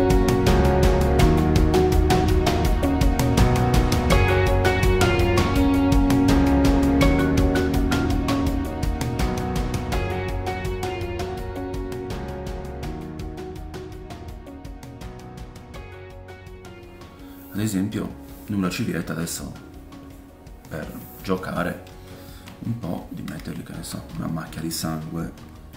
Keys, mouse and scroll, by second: 0.3 ctrl+middle click, 0.4 middle click, 1.7 middle click, 1.9 shift+middle click, 3.5 shift+middle click, 3.9-9.7 drag, 4.7 ctrl+middle click, 4.8 ctrl+middle click, 4.9 middle click, 5.0 middle click, 5.2 shift+middle click, 5.3 ctrl+middle click, 5.4 middle click, 6.7 middle click, 7.7 ctrl+middle click, 7.9 middle click, 8.2 middle click, 8.5 middle click, 8.6 ctrl+middle click, 8.7 shift+middle click, 8.8 middle click, 8.9 ctrl+middle click, 9.1 shift+middle click, 9.5 f, 9.7 middle click, 10.0-18.1 drag, 10.6 middle click, 13.5 middle click, 15.7 ctrl+middle click, 15.8 middle click, 15.9 middle click, 16.0 shift+middle click, 16.1 middle click, 16.3 shift+middle click, 18.1-25.7 middle drag, 25.3 f.